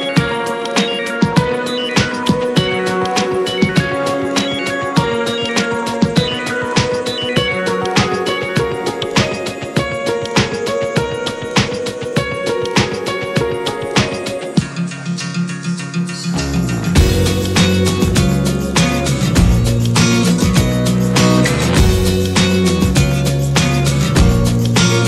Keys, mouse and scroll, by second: 0.8 click, 1.1 scroll down 2, 1.5 click, 2.1 shift+drag, 2.5-3.2 scroll down 1, 3.2 click, 4.4 ctrl+z, 5.0 /, 8.3-8.9 scroll down 2, 8.9-9.3 scroll up 1, 9.3-11.8 middle drag, 11.8 t, 12.5-15.9 middle drag, 15.9 click, 16.1 click, 16.5-19.4 middle drag, 19.4 drag, 19.8 `, 20.5-21.1 middle drag, 21.1 scroll up 2, 21.5-23.0 middle drag, 23.0-23.4 scroll down 5, 23.4 middle click, 23.5 scroll up 1, 23.7 scroll down 2, 23.9-25.0 shift+middle drag.